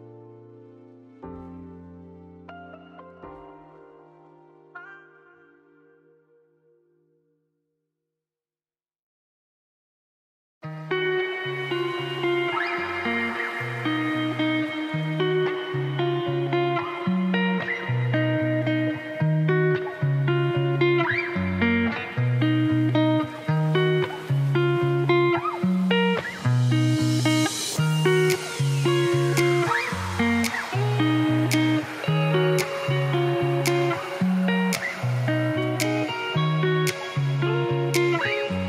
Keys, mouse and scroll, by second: 1.8 a, 2.1 middle click, 2.5 alt+e, 5.0 Tab, 5.3 middle click, 5.8 scroll down 2, 6.1-6.9 scroll up 2, 6.9 click, 7.1 Tab, 7.4 2, 7.6 alt+click, 7.8 s, 9.1 middle click, 9.4 scroll down 1, 9.6 middle click, 10.4 Tab, 11.0 ctrl+s, 11.3-12.6 drag, 12.6 middle click, 13.0 g, 16.0 shift+right click, 16.2 middle click, 16.6 shift+right click, 16.9 middle click, 17.1 scroll up 1, 17.2 middle click, 17.9 shift+a, 18.5 Tab, 18.6 s, 19.3 middle click, 19.7 g, 20.2-23.5 middle drag, 23.5 x, 24.3 click, 24.5-26.1 right drag, 26.1 click, 26.3 click, 27.3 right click, 28.3 2, 28.7-30.3 drag, 30.9 middle click, 31.2 s, 33.1 click, 33.4 2, 33.7 shift+click, 34.1 right click, 34.6 1, 34.8 shift+click, 35.2 g, 36.5 s, 37.5 ctrl+b.